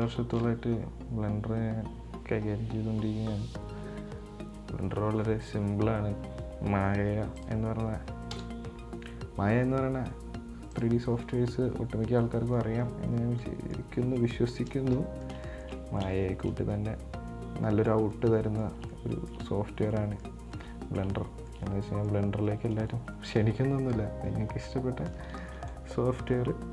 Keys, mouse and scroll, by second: 0.3 shift+a, 8.6 KP_0, 11.0 click, 12.7-13.7 scroll down 11, 12.7-13.0 middle drag, 13.7-14.2 middle drag, 14.2-14.5 scroll down 5, 14.5-24.8 middle drag.